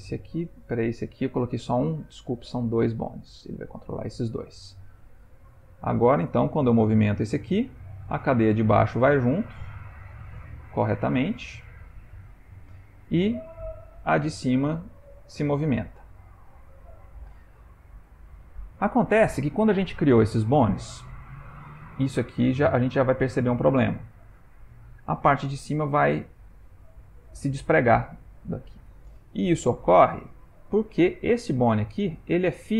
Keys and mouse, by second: 0.7 click, 2.6 click, 5.2 r, 6.6 g, 16.2 ctrl+middle click, 16.8 shift+middle click, 17.7 ctrl+middle click, 18.7 ctrl+middle click, 21.9 r, 23.9 g, 30.1 ctrl+z, 31.3 click.